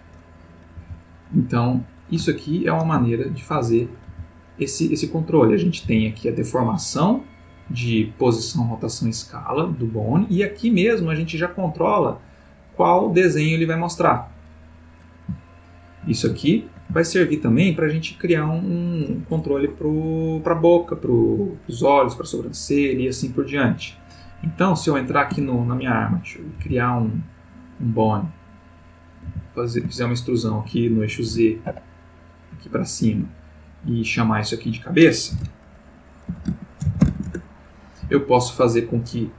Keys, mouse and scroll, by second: 0.8 r, 1.9 ctrl+click, 2.5-3.8 ctrl+middle drag, 4.1 r, 5.1 click, 5.8 r, 9.2 click, 11.3 click, 12.6 click, 13.2 click, 13.8 click, 15.5-16.2 shift+middle drag, 16.4-16.9 ctrl+shift+middle drag, 17.0-17.6 ctrl+shift+middle drag, 24.5 click, 25.4 Tab, 25.9 click, 26.7 e, 28.3 click, 29.3 e, 31.3 x, 31.6 z, 33.6 click, 34.1 click, 35.4 F2, 36.4-37.1 typing, 37.3 shift+Return, 38.1 Tab, 39.0 click.